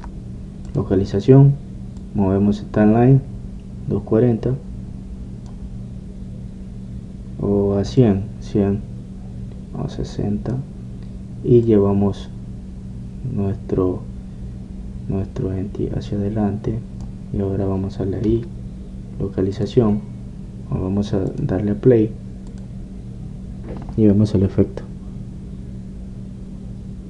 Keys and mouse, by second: 9.2-11.0 drag, 12.8-25.4 drag.